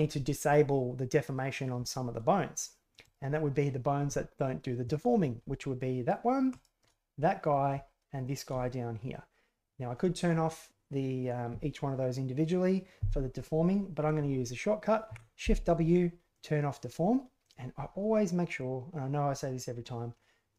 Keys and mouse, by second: 3.0 right click, 6.5 shift+right click, 7.1-7.5 middle drag, 8.2 shift+middle click, 8.6-9.1 middle drag, 15.0 shift+w, 17.6 click, 18.5-20.5 drag.